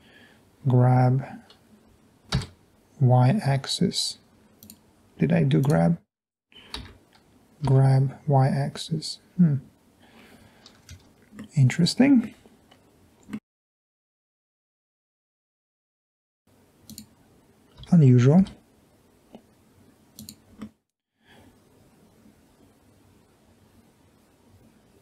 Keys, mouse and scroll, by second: 2.5 y, 7.0 g, 7.8 y, 11.0 Escape, 12.7 middle click, 12.7 scroll up 2, 13.0-13.4 scroll down 1, 13.4 middle click, 13.7 click, 13.8 click, 14.2 click, 14.5 middle click, 14.5 scroll down 2, 15.9 g, 16.1 y, 17.9 g, 18.5 y, 20.2 click, 20.6 middle click, 21.2 middle click, 21.4 middle click, 21.6 middle click, 22.6 middle click, 23.2-25.0 middle drag.